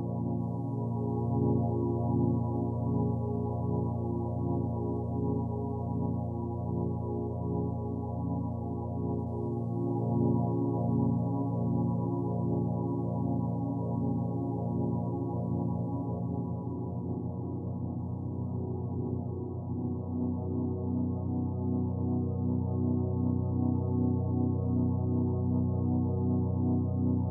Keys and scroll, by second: 21.4 ctrl+z.